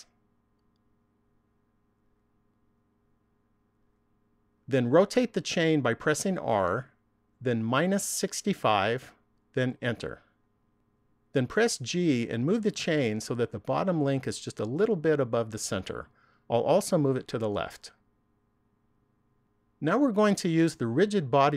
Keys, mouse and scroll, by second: 3.2-3.6 scroll down 1, 6.5 r, 12.0 g, 18.5 click.